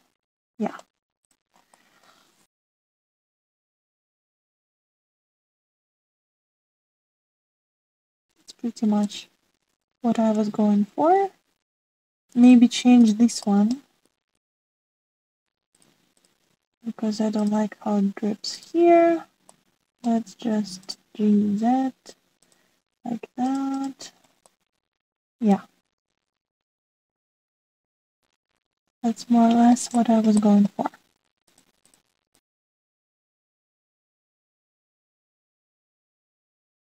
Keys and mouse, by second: 0.6-1.8 middle drag, 2.7 middle click, 3.7 middle click, 5.1 click, 5.8-6.9 middle drag, 7.7 drag, 8.2-12.7 middle drag, 14.4-14.7 shift+middle drag, 15.3 drag, 16.7 click, 20.4 middle click, 21.5 g, 24.4 click, 24.7 click, 25.5-27.5 middle drag, 27.6 middle click, 28.3 middle click, 29.4-29.9 drag, 30.2 click, 32.3 click, 35.0-36.7 middle drag.